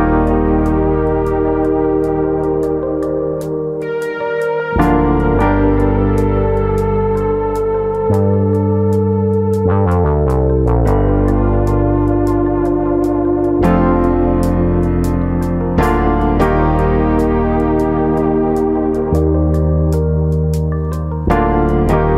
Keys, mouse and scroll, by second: 0.1 g, 1.4 click, 1.8 click, 2.0 g, 2.9 click, 3.1 middle click, 3.9 middle click, 5.1 click, 7.2 ctrl+click, 8.0 shift+e, 10.6 click, 11.5 middle click, 12.8 click, 13.5 ctrl+click, 14.1 ctrl+z, 15.1 shift+click, 15.7 ctrl+z, 16.9 shift+click, 17.5 shift+click, 18.4 shift+e, 19.9 click, 20.4 middle click, 20.8 shift+middle click, 21.4 click, 21.9 shift+click.